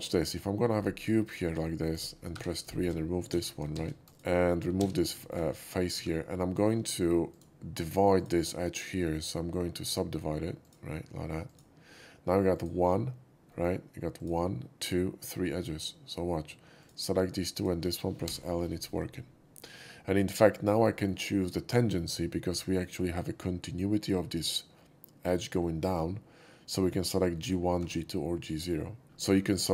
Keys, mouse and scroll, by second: 0.1 click, 0.9 click, 1.4 click, 1.8 right click, 2.3-4.7 typing, 2.5 click, 4.0 right click, 4.1 click, 4.4 middle click, 5.2 shift+middle click, 5.9 2, 6.1 middle click, 6.5 shift+middle click, 7.2 shift+click, 8.1 shift+click, 10.5 click, 11.4 click, 12.5 click, 13.4 middle click, 14.1 click, 16.7 shift+click, 17.5 shift+click, 18.2 l, 19.7-20.4 middle drag, 20.9 shift+middle click, 22.4 shift+middle click, 27.4 Tab, 28.4 Tab, 29.3 shift+middle drag.